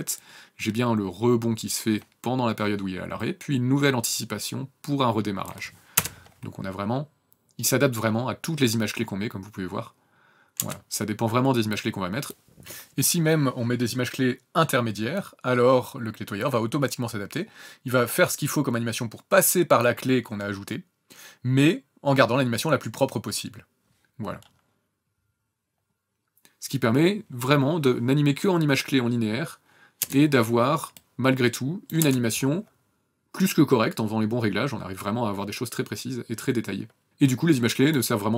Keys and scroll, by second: 5.9 KP_0, 10.6 KP_0, 21.9 KP_0, 28.3 KP_0, 30.3 KP_0, 36.6 KP_0.